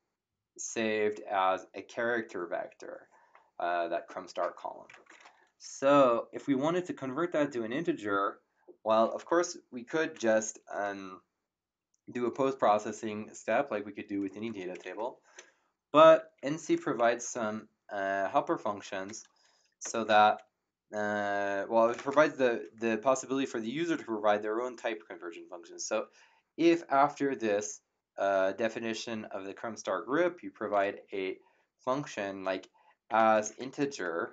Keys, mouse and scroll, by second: 9.2 m, 12.3 BackSpace, 17.0 Up, 19.8 BackSpace, 21.8 <, 21.9 ,, 21.9 space, 32.8-34.3 typing.